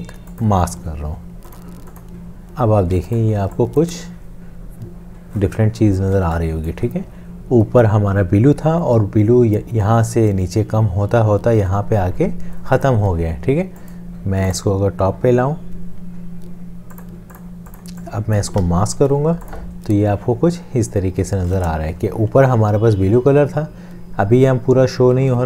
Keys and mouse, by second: 2.9 space, 3.6 click, 6.2 space, 6.6 click, 6.7 space, 14.5 right click, 19.0 ctrl+7, 25.2 ctrl+z.